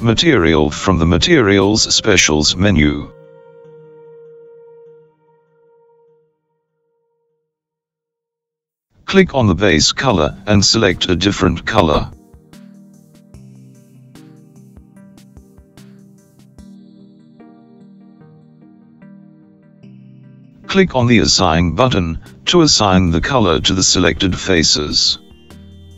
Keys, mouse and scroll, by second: 0.2 click, 2.4-6.2 drag, 12.4 click, 24.4 click.